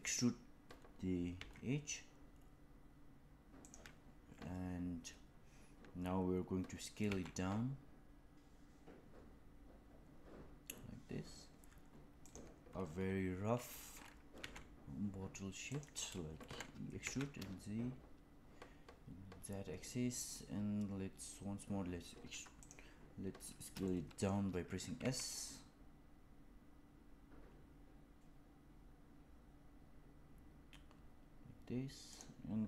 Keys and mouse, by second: 1.4 e, 8.2 s, 14.5 e, 16.4 e, 23.9 shift+middle click, 24.9 s.